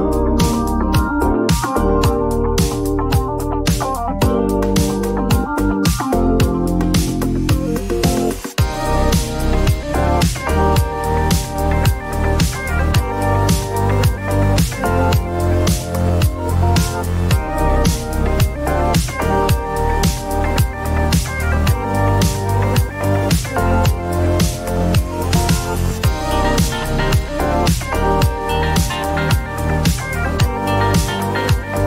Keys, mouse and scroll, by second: 1.3 click, 2.5 click, 5.2-6.5 typing, 8.0 Return, 10.2 click, 10.7 typing, 12.7 Return, 14.4 click, 14.7-16.1 typing, 16.2 Return, 19.9 click, 21.1-24.6 drag, 25.5 click, 27.4 click, 29.6-31.8 drag.